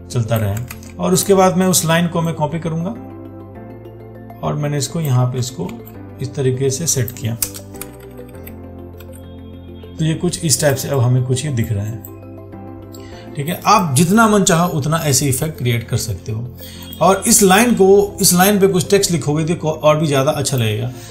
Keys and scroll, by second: 0.9 ctrl+z, 6.0 ctrl+t.